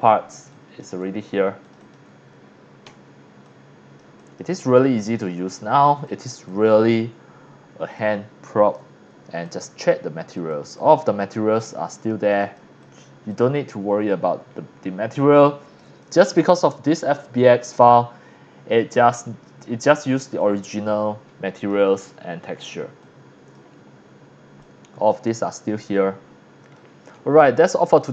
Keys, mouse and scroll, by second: 0.7 click, 1.0 drag, 1.6 click, 2.2 Tab, 2.8 f, 3.4 c, 3.4 click, 4.2 click, 4.6 click, 5.0-5.3 drag, 5.6 click, 6.9-7.2 scroll up 2, 7.2-7.8 scroll down 2, 7.9 x, 8.0-8.7 drag, 9.5 click, 10.3 click, 11.1 scroll down 1, 11.6 click, 11.9 click, 12.4 click, 12.8 click, 13.3 click, 13.9 scroll down 4, 14.5-15.0 scroll up 3, 15.4 x, 15.5-15.8 drag, 15.8 c, 16.0 click, 19.4 scroll up 1, 19.6 scroll down 1, 20.1 c, 20.4-20.8 drag, 21.9 middle click, 22.5 scroll down 1, 22.6 scroll up 1, 23.0 c, 23.0 click, 23.9 scroll up 3, 24.2 scroll down 1, 24.6 x, 24.6-25.1 drag, 26.2 scroll down 1, 26.8-27.4 drag, 26.8 x, 27.1 c, 28.0 click.